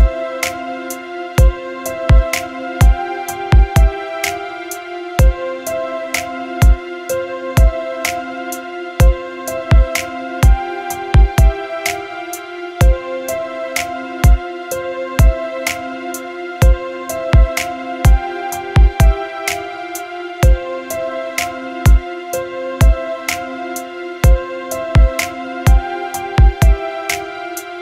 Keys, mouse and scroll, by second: 20.0 click, 22.8-24.4 drag.